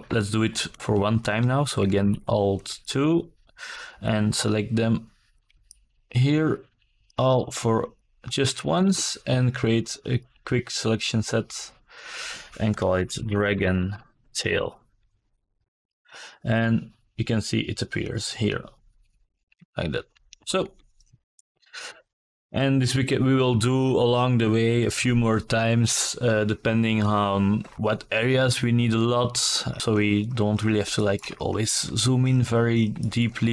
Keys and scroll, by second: 9.3-11.5 typing, 11.7 Return, 16.9 alt+KP_2.